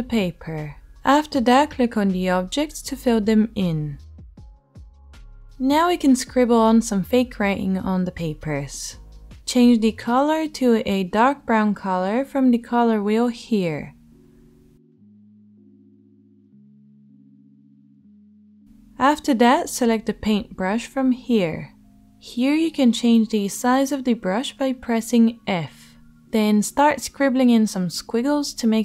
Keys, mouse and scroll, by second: 4.4-19.6 middle drag, 4.4-5.4 right drag, 19.6-22.4 shift+drag, 19.8-22.4 middle drag, 19.8-22.4 right drag, 25.9 ctrl+z.